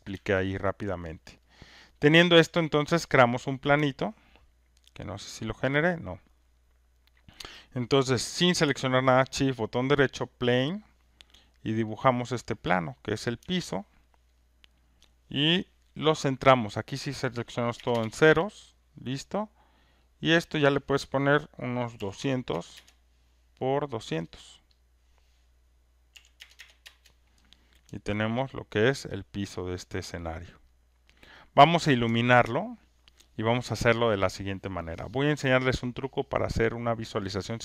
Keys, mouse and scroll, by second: 0.8 alt+click, 1.2 alt+right click, 1.8 alt+click, 2.3 alt+right click, 2.8 alt+click, 3.6 click, 4.5 alt+middle click, 5.8 alt+click, 6.3 alt+middle click, 10.3 shift+right click, 13.2 click, 14.0 alt+right click, 15.0 alt+click, 16.8 click, 17.9 Return, 18.5 alt+middle click, 20.1 click, 21.7-22.6 typing, 22.7 Return, 22.8 Return, 24.8 click, 26.1 2, 26.5 Return, 28.2 alt+right click, 28.5 alt+middle click, 28.8 alt+click, 29.3 alt+right click, 29.9 alt+middle click, 30.1 alt+scroll, 30.5 alt+click, 30.7 alt+middle click, 31.0 alt+right click, 31.3 alt+middle click, 32.5 alt+right click, 32.9 click.